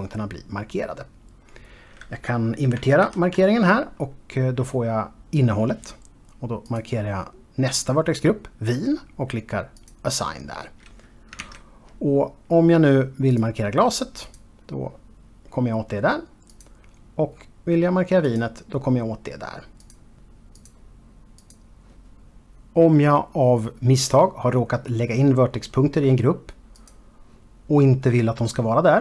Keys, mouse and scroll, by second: 3.7 ctrl+i, 7.3 click, 10.4 click, 12.1 alt+a, 14.0 click, 14.9 click, 17.2 click, 19.0 click, 20.5 click, 21.3 click, 27.7 click.